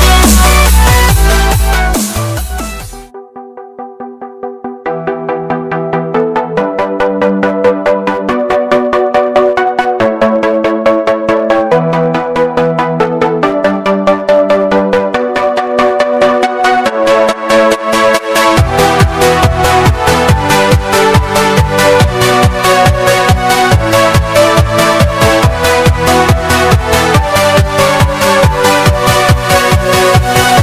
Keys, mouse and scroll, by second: 4.0-4.6 scroll down 1, 5.1 click, 5.9-6.3 scroll up 1, 6.3 click, 7.9 click, 10.0-10.6 scroll up 1, 10.6 click, 12.3-12.6 scroll down 1, 13.0-13.6 scroll up 1, 14.7 click, 16.2-18.0 drag, 19.3 s, 21.0-24.3 drag, 24.3 scroll down 1, 26.1-28.7 drag, 29.1-29.5 scroll up 1, 29.5 click.